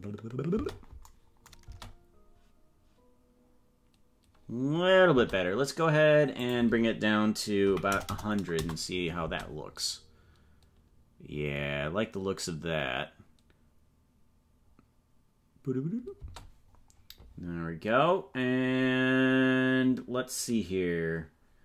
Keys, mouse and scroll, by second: 0.5 space, 1.6 space, 5.2 space, 6.3-9.4 drag, 8.0 KP_0, 9.2 space, 16.2 space.